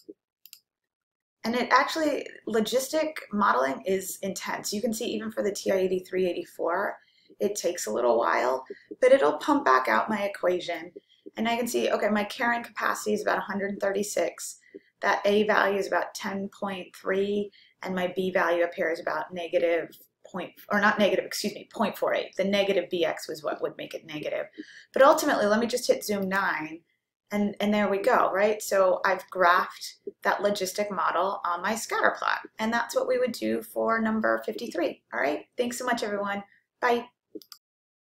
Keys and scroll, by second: 0.5 Return, 26.3 9.